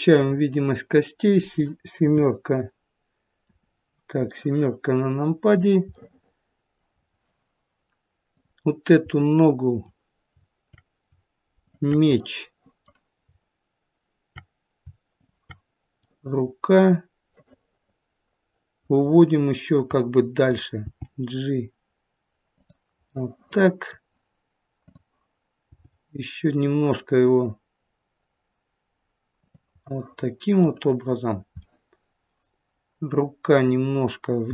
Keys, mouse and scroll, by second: 0.0 click, 1.9 KP_7, 3.3 KP_7, 4.2 middle click, 5.8 middle click, 6.9-8.2 scroll down 2, 8.2 click, 9.0 middle click, 11.5 shift+click, 12.1 middle click, 15.1 shift+click, 16.0 middle click, 20.0 middle click, 20.8 g, 23.8 middle click, 24.7 click, 25.6 g, 29.8 middle click, 31.2-32.9 scroll up 2, 31.5 middle click, 33.5 click, 34.4 g.